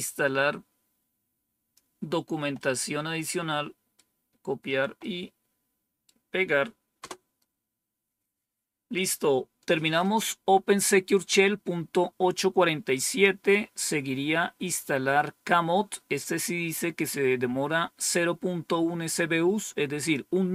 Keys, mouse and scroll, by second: 2.5-4.0 right drag, 4.9-6.0 right drag, 6.9 Return, 13.0 click, 19.9 click.